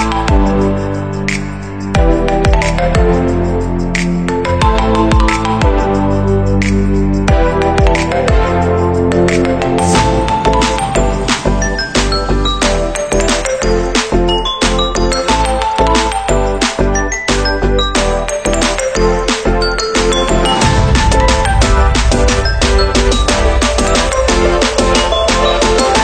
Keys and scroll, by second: 3.1 ctrl+v, 21.4 Delete, 25.1 ctrl+-.